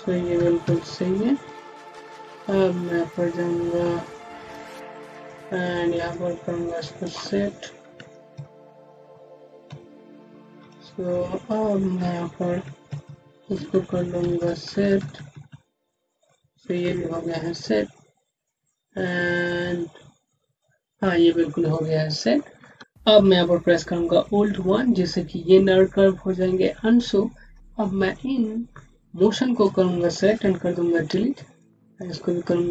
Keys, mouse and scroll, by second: 0.2 Up, 0.5 Right, 4.0 click, 8.2 alt+Down, 9.5 alt+Left, 11.0 ., 12.8 alt+Right, 13.4 alt+Up, 14.1 alt+Right, 14.9 Up, 17.7-20.7 typing, 18.3 scroll down 1, 21.1 scroll down 1, 22.3 scroll down 1, 24.1 scroll down 1, 24.5 1, 26.9 scroll down 1, 27.6 middle click, 28.0 click, 30.6 Delete, 31.5 click, 32.1 Delete.